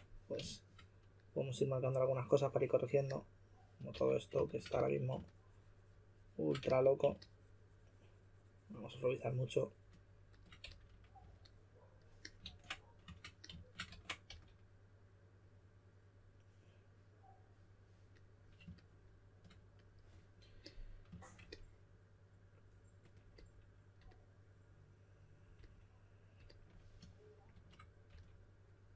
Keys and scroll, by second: 3.9 s, 4.7 s, 6.6 s, 10.6-11.7 typing, 12.4 super+z, 13.9 super+z, 14.2 s, 28.1 s.